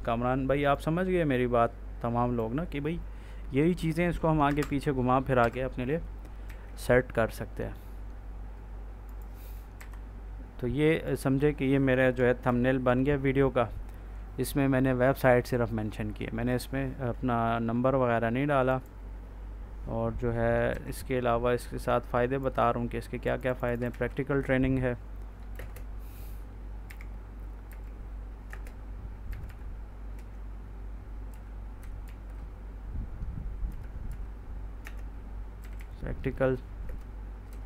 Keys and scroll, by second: 4.3 Delete, 5.3 F4, 6.3 ctrl+s, 9.7 Up, 12.3 ctrl+s, 20.6 ctrl+d, 23.8 ctrl+a, 25.6 space, 26.7-29.8 typing, 31.2 k, 31.9 shift+t, 33.6-37.6 typing.